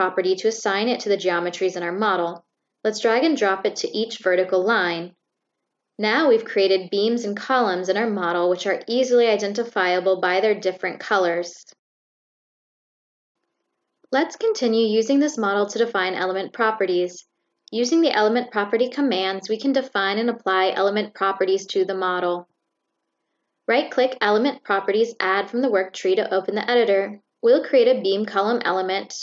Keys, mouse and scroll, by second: 1.4-3.9 drag, 4.8-6.8 drag, 8.3-10.0 drag, 22.2 click, 24.8 click, 25.3 right click, 27.1 click, 28.5 click.